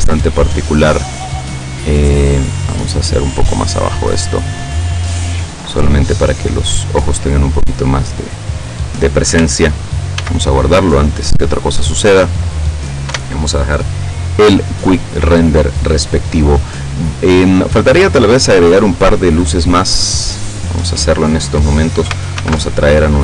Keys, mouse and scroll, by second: 0.6 click, 1.4-2.8 drag, 2.8-4.2 middle drag, 6.6 right click, 7.2-9.0 middle drag, 10.2 ctrl+s, 10.5 ctrl+click, 11.2-12.7 middle drag, 13.2 F12, 18.2 Escape, 18.6-19.3 scroll down 4, 19.4 middle click, 20.4-21.4 middle drag, 22.4 alt+h, 23.1-23.2 middle drag.